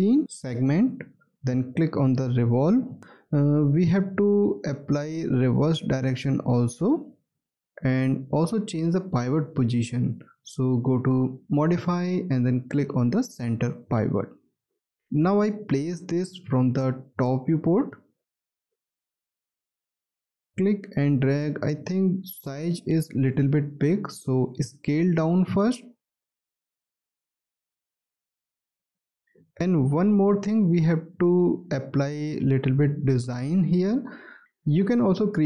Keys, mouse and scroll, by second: 0.0 1, 7.4 scroll down 1, 7.8 alt+click, 15.5 space, 17.3 space, 18.0-18.4 scroll down 1, 21.1-22.7 scroll up 1, 23.7 alt+middle click, 24.3-25.3 alt+scroll up 1, 29.6 w, 33.7-34.3 scroll up 1.